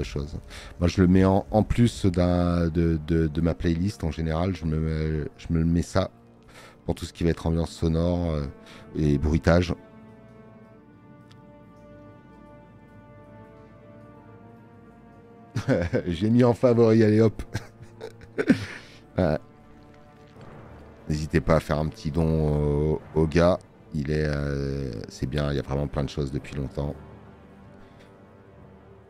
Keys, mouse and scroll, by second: 21.5 space, 21.6 click.